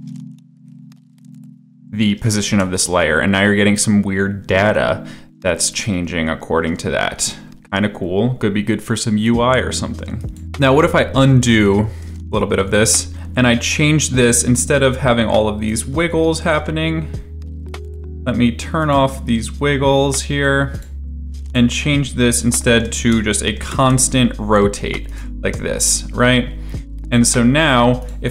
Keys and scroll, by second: 2.5 space, 11.0 ctrl+z, 12.8 ctrl+z, 15.8 e, 22.0-24.2 typing, 25.4 space.